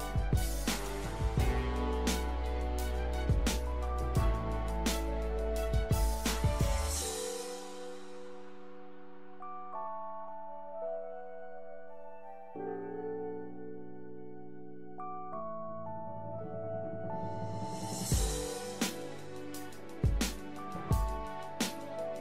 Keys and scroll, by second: 15.4 shift+a, 19.6-20.8 typing.